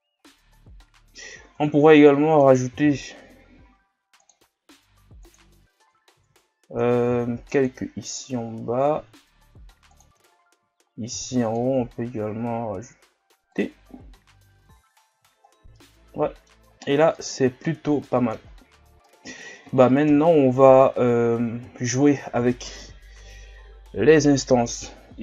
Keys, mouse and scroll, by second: 0.1 scroll up 1, 0.9 scroll down 1, 1.2-1.6 scroll up 1, 1.6 Tab, 2.7 ctrl+r, 6.2 ctrl+z, 7.1 ctrl+r, 10.3 shift+scroll up 3, 11.1 ctrl+r, 13.8 scroll down 5, 14.2 Tab, 14.6 a, 15.1 a, 15.4 scroll down 2, 15.7-16.6 middle drag, 16.6 scroll up 5, 17.1-18.4 middle drag, 18.4 scroll up 3, 19.1-20.1 middle drag, 20.1 KP_1, 20.9 scroll down 6, 21.7 shift+scroll up 5.